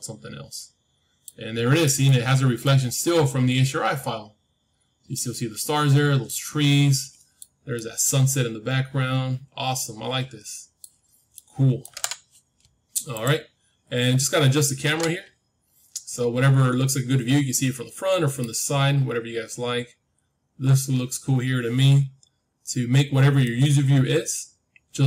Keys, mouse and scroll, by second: 1.8-4.5 middle drag, 5.5-9.7 middle drag, 5.5-6.2 scroll up 1, 11.0 middle click, 15.5-17.9 middle drag, 18.6-22.6 middle drag, 23.3-25.0 middle drag.